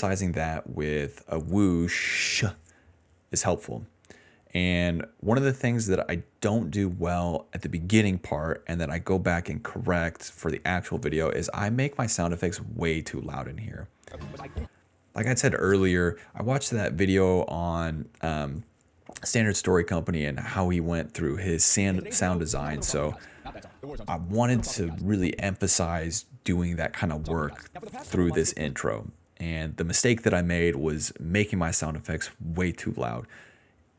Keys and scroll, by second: 12.9 s, 13.0 s, 13.3 s, 15.0 d, 15.1 d, 16.2-17.3 typing, 18.4 BackSpace, 19.0 d, 19.1 d, 19.2 d, 21.8 space, 22.6 d, 24.0 space, 24.5 space, 24.9 space, 25.6 s, 27.2 space, 28.6 space.